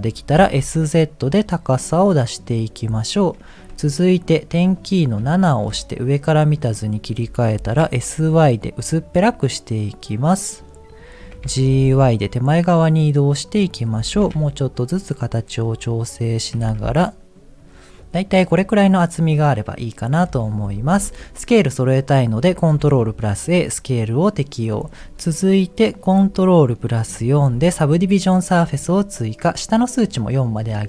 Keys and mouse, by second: 0.3 s, 5.3 KP_7, 7.5 s, 11.3 g, 13.9 s, 16.5 g, 18.5 middle click, 19.5 middle click, 22.0 middle click, 30.1 click, 30.4 click.